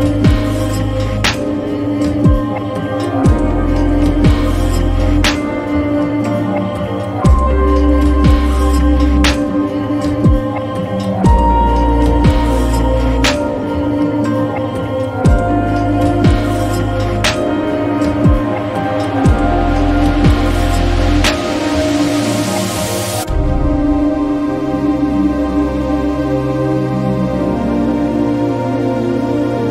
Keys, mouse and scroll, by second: 2.7-18.3 drag, 19.1 click, 20.1 ctrl+a, 21.3-21.6 typing, 22.2 Return, 23.6-28.1 drag.